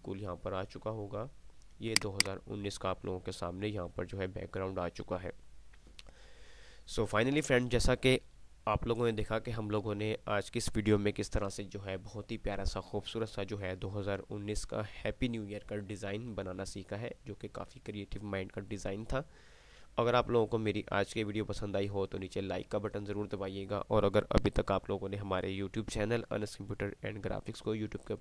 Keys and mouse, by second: 0.0-0.7 typing, 2.0 click, 4.7 typing.